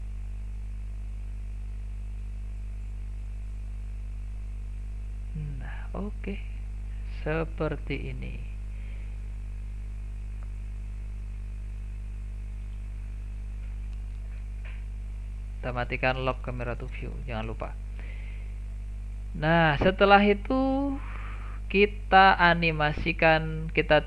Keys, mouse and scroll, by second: 6.6 click, 8.1 click, 9.8 click, 10.9 s, 13.6 click, 16.9 click, 17.7-18.1 scroll down 1, 18.1-18.8 middle drag, 18.8-19.2 scroll down 1, 19.2-24.0 middle drag.